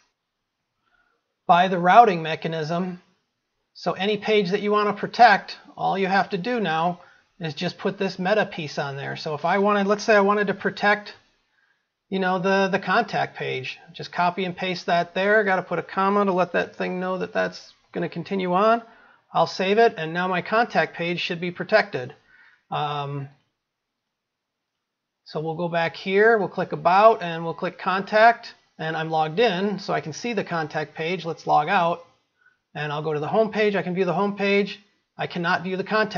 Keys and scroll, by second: 11.7 ctrl+c, 13.9 ctrl+v, 19.5 ctrl+s.